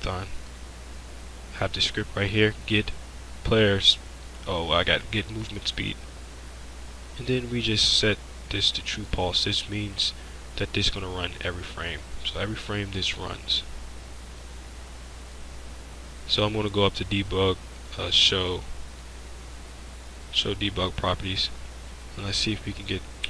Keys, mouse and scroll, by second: 6.3-8.9 drag, 9.9-12.1 drag, 14.3-20.5 drag.